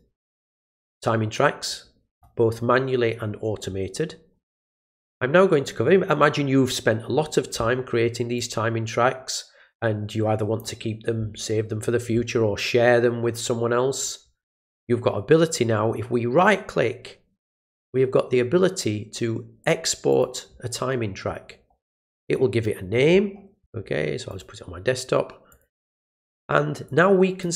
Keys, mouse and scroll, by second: 8.3-10.6 drag, 16.4 right click, 20.1 click, 24.3 click, 25.5 click, 26.8 click.